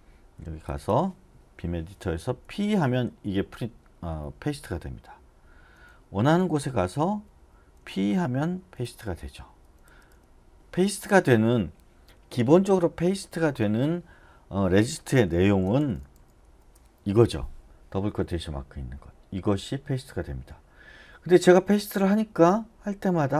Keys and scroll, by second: 5.6-7.9 typing, 15.2-16.7 typing.